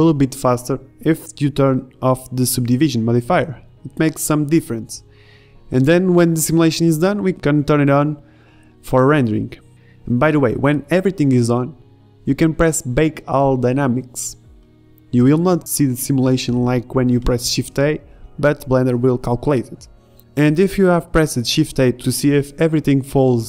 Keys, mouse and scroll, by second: 4.0 right click, 13.3 shift+Left, 13.7 alt+a, 17.9-19.5 middle drag.